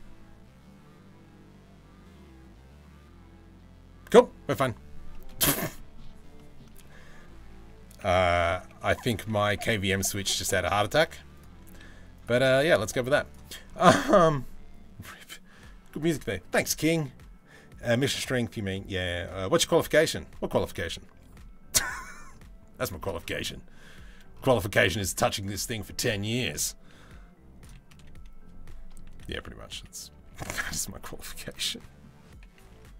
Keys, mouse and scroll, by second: 4.7 middle click, 5.4 shift+middle drag, 6.0 middle click, 7.6 r, 10.0 g, 11.2 s, 12.0 g, 22.5-28.7 middle drag, 28.7 r, 31.2 middle click, 32.2 s.